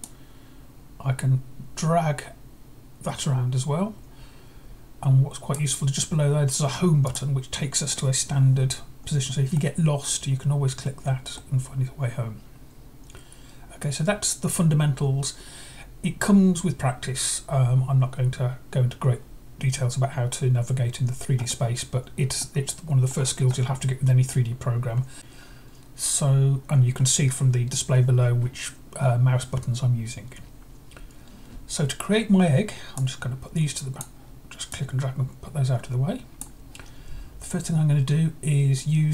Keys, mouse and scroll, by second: 0.0-5.5 drag, 7.0-8.0 drag, 9.5-11.3 middle drag, 21.3 scroll up 1, 22.3-23.4 middle drag, 22.4 scroll up 1, 23.0-23.4 scroll down 1, 31.1-31.7 scroll down 1, 31.7-32.9 scroll down 1, 32.9-34.0 drag, 34.7-36.3 drag, 37.7-39.1 scroll down 1.